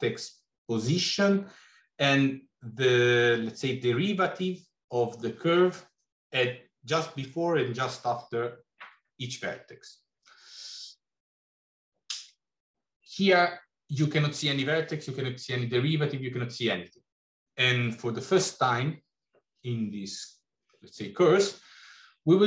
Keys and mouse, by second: 13.2 middle click.